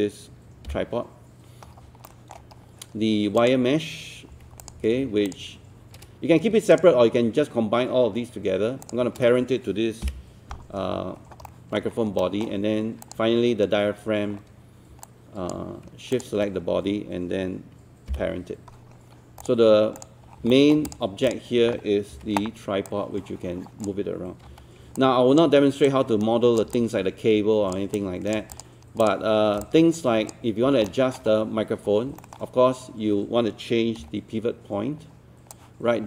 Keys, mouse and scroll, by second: 0.7 p, 2.1 alt+middle click, 2.5-3.4 scroll up 1, 3.4 click, 4.3 click, 4.6 click, 6.7 shift+click, 8.8 shift+click, 10.1 shift+p, 10.9-11.3 scroll up 1, 11.5 alt+middle click, 11.9 scroll up 1, 12.2 alt+middle click, 13.1 click, 13.8-14.4 scroll down 1, 14.4-14.9 scroll up 1, 15.1 alt+click, 16.1 shift+click, 18.1 p, 18.9-19.4 scroll down 1, 19.4 click, 20.3 scroll down 1, 20.5 alt+middle click, 20.9 click, 22.1 typing, 22.9 click, 24.5 z, 25.0 alt+click, 26.8 alt+click, 27.9 alt+click, 30.9 alt+middle click, 31.3-31.9 scroll up 1, 32.2 alt+middle click, 34.0 d, 35.5-36.0 drag.